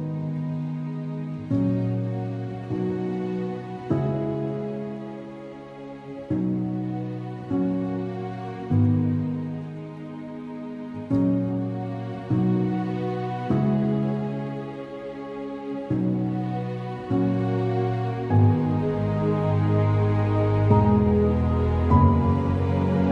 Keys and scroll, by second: 1.7 space, 2.4 alt+x, 4.8 `, 7.2 `, 10.8 alt+x, 11.8 4, 13.6 alt+x, 14.8 x, 17.7 alt+space, 21.3 alt+space.